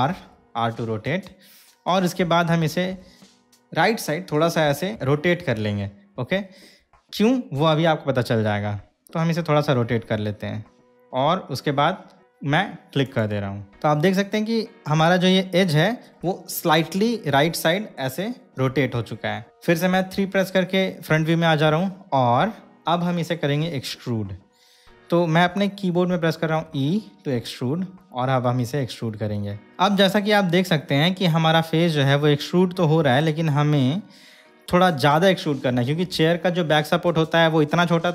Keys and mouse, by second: 0.3 r, 13.3 click, 13.7-16.2 middle drag, 19.5 KP_3, 26.8 e.